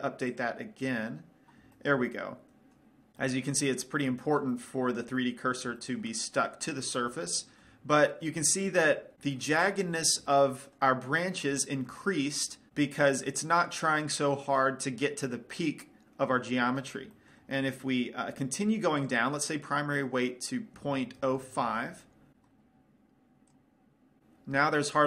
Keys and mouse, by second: 1.4-2.5 drag, 2.5 middle click, 3.6-5.0 middle drag, 5.4-9.2 middle drag, 9.8-10.8 middle drag, 12.7 middle click, 13.5 middle click, 17.7-19.5 middle drag, 19.5-21.2 drag, 24.0 click.